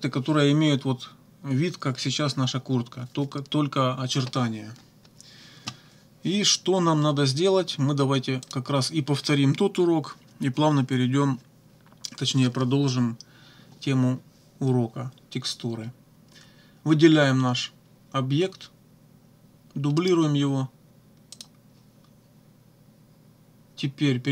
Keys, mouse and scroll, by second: 8.4 click, 20.0 right click, 21.4 click.